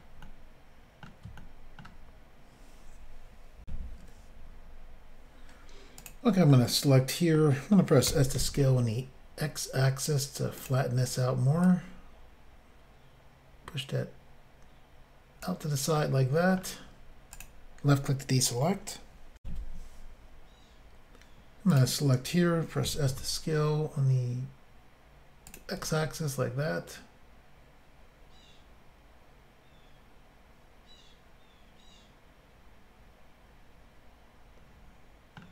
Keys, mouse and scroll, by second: 0.2 middle click, 1.4 shift+middle click, 1.8 middle click, 3.6 Insert, 6.0 click, 6.1 click, 6.5 middle click, 8.1 typing, 10.6 click, 10.7 click, 11.7 click, 16.0 middle click, 17.4 click, 17.4 click, 19.4 Insert, 21.7 click, 21.8 click, 22.9 typing, 25.5 click, 25.6 click, 25.8 middle click.